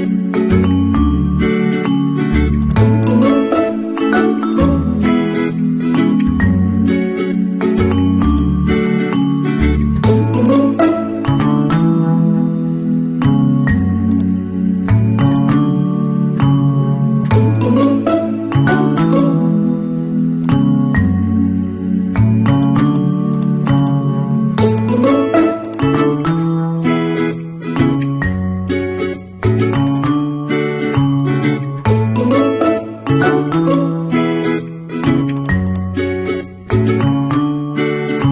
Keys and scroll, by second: 2.0 ctrl+z, 3.8 BackSpace.